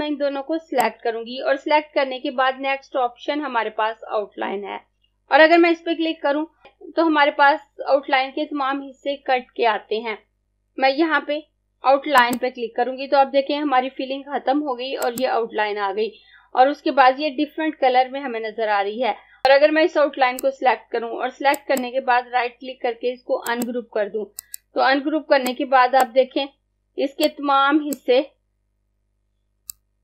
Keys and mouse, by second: 12.2 click, 15.0 click, 19.4 click, 21.6 right click, 23.4 click.